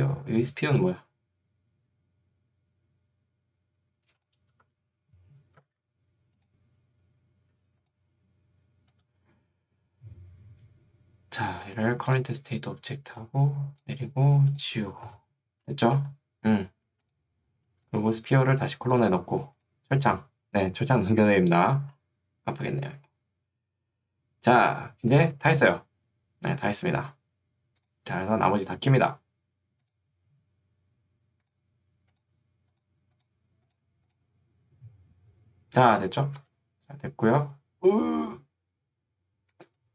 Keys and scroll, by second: 5.8 ctrl+z, 36.4 2, 39.8 1.